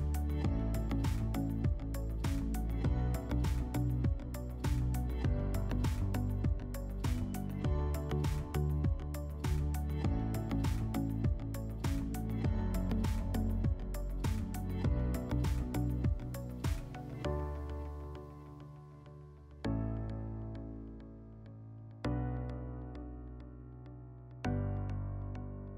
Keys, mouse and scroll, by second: 2.1 click, 2.8 middle click, 4.2 click, 6.3 click, 9.6 click, 10.5 click, 11.6 click, 18.9 click, 20.3 click, 20.9-22.0 typing, 23.4 Tab, 24.9 0.